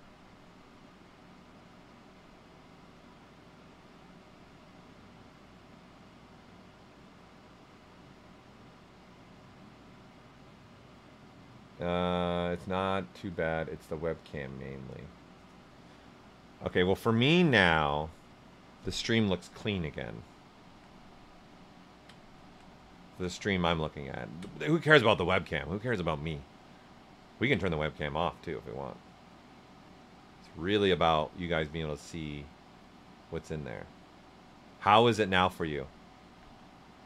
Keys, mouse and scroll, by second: 1.4-9.1 right drag, 9.1-21.4 right drag, 21.4 ctrl+right click, 22.4 ctrl+alt+right click, 22.6 right click, 23.7 ctrl+alt+right click, 27.5-37.0 right drag.